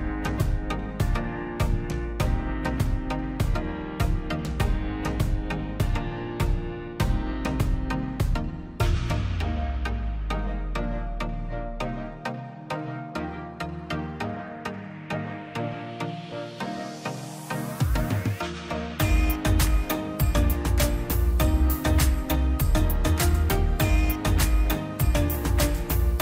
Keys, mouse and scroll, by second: 0.9 p, 1.1 click, 1.8 ctrl+z, 2.3 click, 2.7 ctrl+z, 2.9 space, 3.1 click, 5.3 click, 11.1 p, 11.3 click, 11.7 scroll down 1, 12.4 click, 13.4 scroll down 1, 13.9 middle click, 14.2 scroll up 1, 14.7 click, 15.0 scroll down 1, 15.9 click, 16.3 scroll down 1, 17.1 click, 17.7 Delete, 17.9 scroll down 1, 18.3 middle click, 18.6 scroll down 1, 19.1-20.8 middle drag, 20.8 click, 21.0-21.8 scroll down 1, 22.0 click, 22.8 scroll up 1, 23.3 click, 23.5 scroll up 1, 24.0 click, 25.8 scroll up 1.